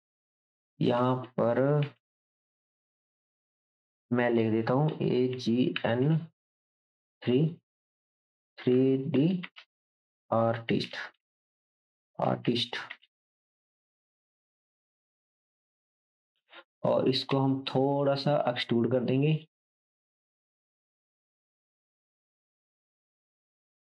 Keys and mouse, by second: 1.5 g, 2.5 Tab, 3.3 BackSpace, 4.9 shift+a, 5.3 shift+g, 5.7 shift+n, 6.0 space, 7.1-12.9 typing, 14.5 KP_Enter, 15.4 Tab, 15.8 click, 17.3 shift+z, 19.3 click, 20.7-23.9 drag.